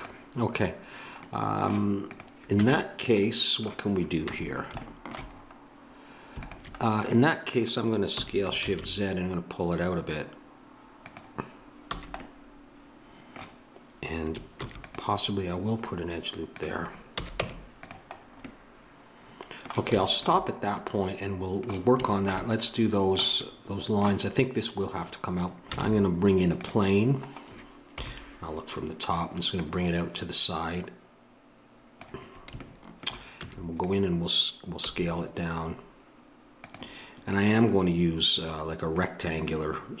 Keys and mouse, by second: 2.0-4.2 drag, 2.6 Tab, 4.2 a, 6.4-11.0 drag, 8.1 s, 11.8 a, 14.5 ctrl+r, 17.1 a, 17.4 Tab, 25.7 shift+a, 27.9 KP_7, 29.5-31.5 middle drag, 32.5-34.8 middle drag, 33.3 Tab, 34.8 s, 37.2-39.5 drag, 39.5-40.0 middle drag.